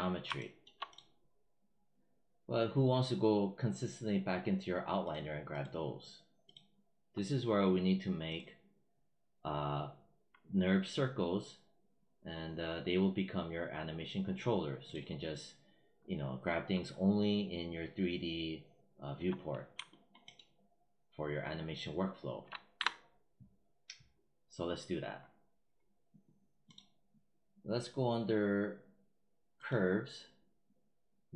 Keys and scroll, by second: 22.6 w.